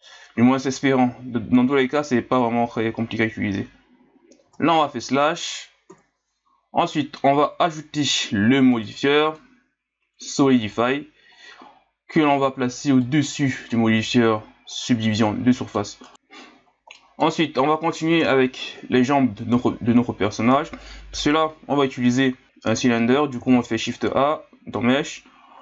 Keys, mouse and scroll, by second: 4.4 Tab, 5.9 KP_Divide, 6.8-8.7 middle drag, 8.7 click, 10.7-13.7 drag, 14.7-16.0 middle drag, 16.0 right click, 16.1 KP_Divide, 16.5 scroll down 2, 17.0-18.2 middle drag, 18.2 KP_1, 19.0 scroll down 1, 20.1 scroll down 4, 23.4 shift+a.